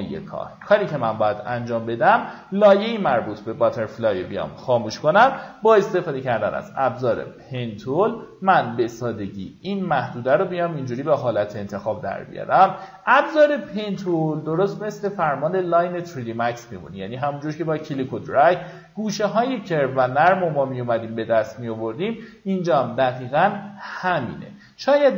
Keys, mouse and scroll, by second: 0.5 click, 3.0 alt+scroll up 1, 4.0-5.0 drag, 6.7-20.9 drag, 21.1 alt+scroll down 1, 22.4-23.1 alt+scroll up 3, 24.9 BackSpace.